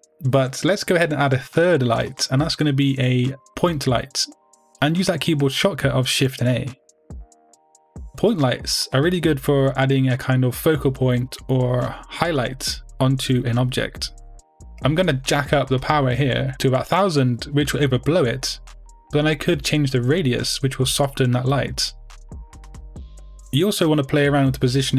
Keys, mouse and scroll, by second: 0.0 r, 1.3 click, 1.8 g, 2.5 click, 2.9 middle click, 3.2 scroll down 2, 3.5-4.5 middle drag, 8.1 shift+a, 8.8 middle click, 9.2 g, 10.1 click, 11.7 KP_0, 19.1 click, 19.1 0, 19.3 Return, 23.7 click.